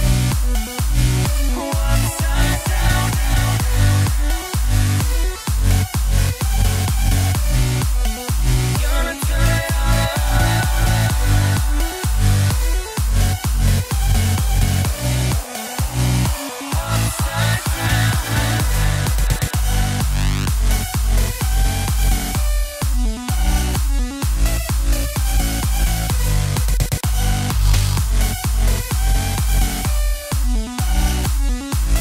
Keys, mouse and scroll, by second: 2.0 b, 2.9 b, 4.3 z, 6.2 b, 7.0 b, 9.7 x, 10.2 Tab, 11.8 z, 12.5-14.1 scroll down 5, 14.1 KP_0, 16.2-19.1 drag, 19.1 space, 25.0 space.